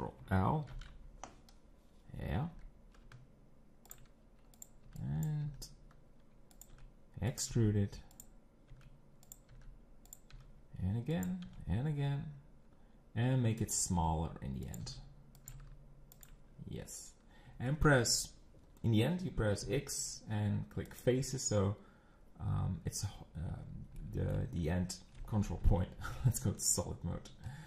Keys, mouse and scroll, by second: 0.7 ctrl+l, 2.5 g, 4.6 click, 5.2 b, 5.5 g, 6.7 e, 7.5 g, 8.7 e, 9.5 g, 10.3 e, 11.5 e, 14.0 e, 14.8 5, 15.4 s, 15.5 g, 16.5-17.4 scroll down 4, 17.4 scroll up 1, 17.7 shift+middle click, 18.0 scroll up 1, 20.7 scroll up 4, 22.1-22.6 scroll down 5, 23.6-24.0 scroll up 5, 24.0-25.0 middle drag, 24.8 scroll down 4, 25.6 ctrl+KP_Decimal, 27.1 scroll down 4, 27.5 middle click.